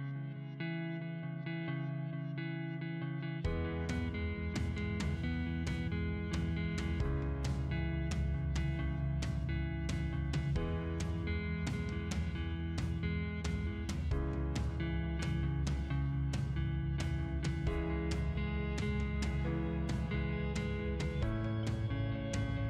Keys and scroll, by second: 1.1 p, 1.5 space, 6.0 Escape, 15.9 o, 16.2 space, 17.1 2, 17.6 Return, 21.4 space.